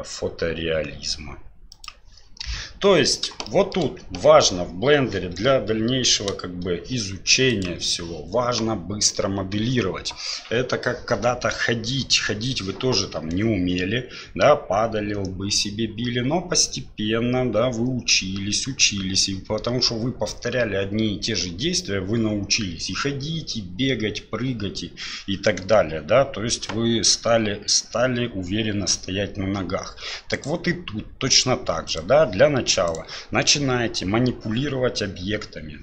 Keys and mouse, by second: 3.5 shift+middle click, 7.5 click, 30.3-31.2 right drag, 31.9 right click, 32.8-33.7 right drag.